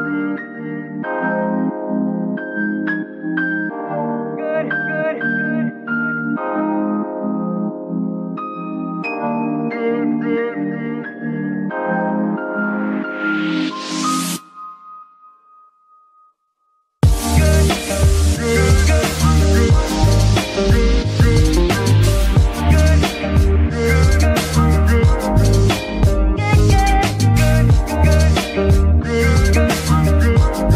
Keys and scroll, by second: 20.8 ctrl+shift+Tab, 23.1 z, 23.8 g, 24.5 Escape, 27.4 g, 27.8 Escape.